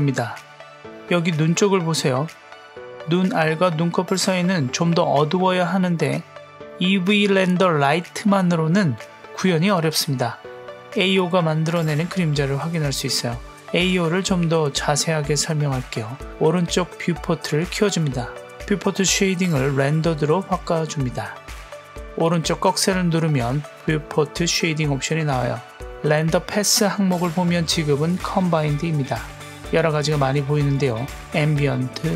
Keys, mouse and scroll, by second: 0.0 click, 0.5 click, 1.4-1.9 scroll up 1, 3.0 click, 3.6 click, 7.3 click, 9.8-10.1 scroll down 1, 13.1-17.5 drag, 18.8 click, 21.9-32.1 drag.